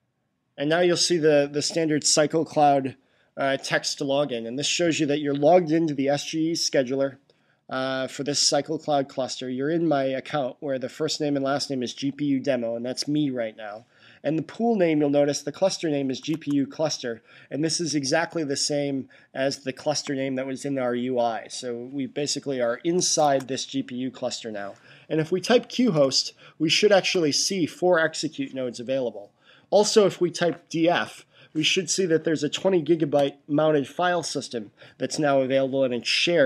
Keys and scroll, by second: 16.2 Tab, 23.1 Tab, 25.3-26.4 typing, 30.5-31.4 typing.